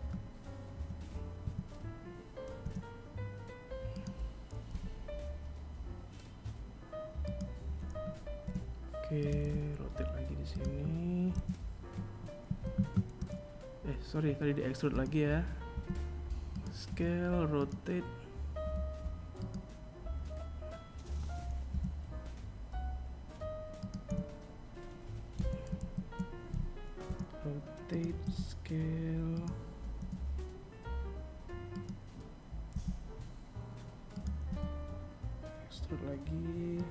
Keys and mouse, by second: 0.7 r, 2.8 g, 6.6 e, 7.5 g, 9.5 s, 11.3 r, 13.9 s, 15.0 r, 16.7 g, 19.8 e, 22.2 e, 23.9 z, 25.1 r, 26.3 s, 28.1 r, 30.8 s, 32.6 e, 35.4 s.